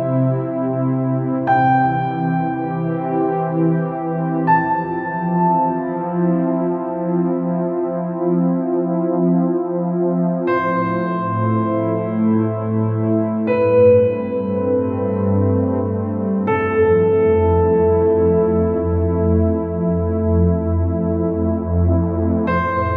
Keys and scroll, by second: 22.6 ctrl+0.